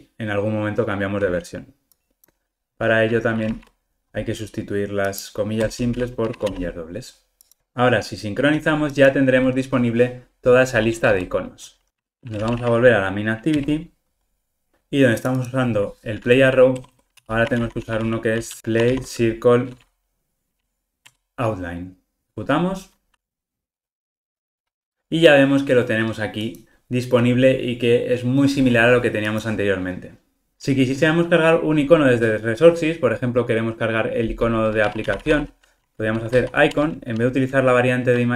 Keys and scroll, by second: 21.1 Return, 22.2 ctrl+r, 30.5 super+z.